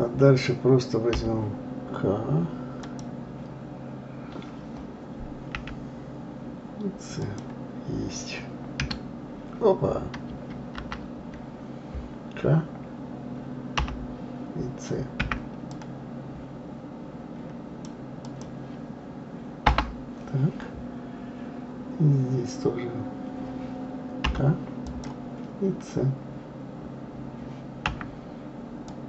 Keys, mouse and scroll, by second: 10.8 ctrl+z, 13.8 k.